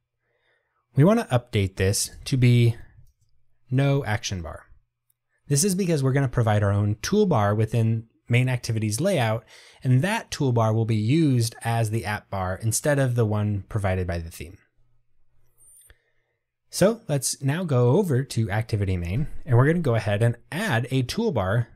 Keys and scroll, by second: 3.8 Return.